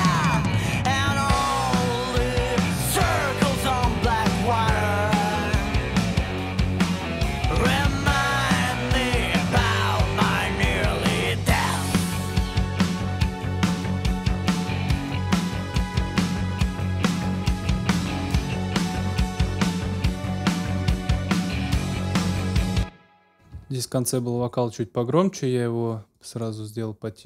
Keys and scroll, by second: 22.5 space, 23.5 ctrl+alt+space.